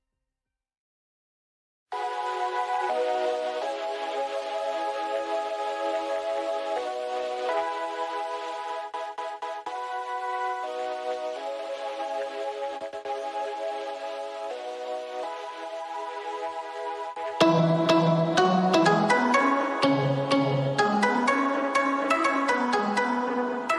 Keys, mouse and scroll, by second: 3.0 alt+scroll down 1, 3.6 scroll up 1, 10.2-10.6 alt+scroll up 1, 10.7 click, 11.3 alt+scroll down 1, 11.8 click, 12.0 space, 12.7-13.0 alt+scroll up 1, 13.5-15.9 drag, 16.4 alt+scroll down 1, 16.5 space, 16.6 click, 16.8 space, 17.0 alt+scroll down 1, 17.3-17.7 alt+scroll up 1, 18.3 click, 20.4-20.8 scroll down 2, 21.4 ctrl+s, 22.3 click.